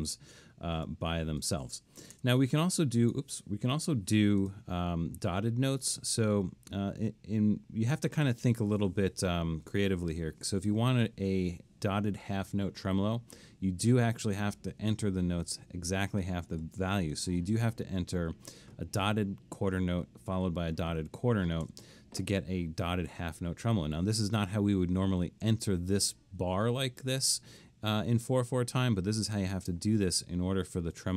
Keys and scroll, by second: 0.8 BackSpace, 2.2 BackSpace, 3.7 3, 17.2 typing, 20.3 typing, 21.7 typing, 23.1 Escape.